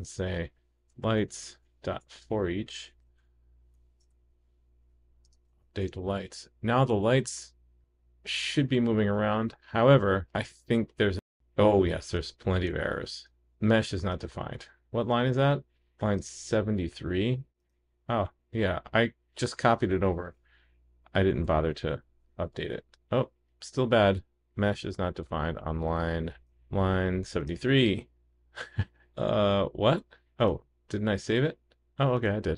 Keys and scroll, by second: 3.7 super+d, 5.6 super+s, 20.0 super+d, 22.8 super+s, 31.1 super+s.